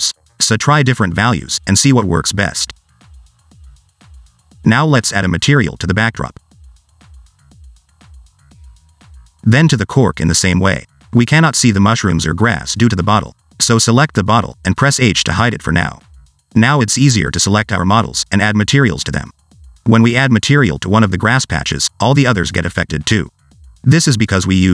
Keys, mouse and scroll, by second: 0.9 click, 1.7 click, 2.3 0, 5.0 click, 5.7 click, 6.8 click, 9.6-10.3 scroll up 2, 10.3 click, 11.1 click, 12.1 click, 13.9 click, 15.5 h, 16.0 shift+middle click, 16.6 click, 17.0 click, 17.7 scroll up 1, 17.8 click, 18.1 click, 18.4 click, 19.2 click, 19.9 click, 21.3 click.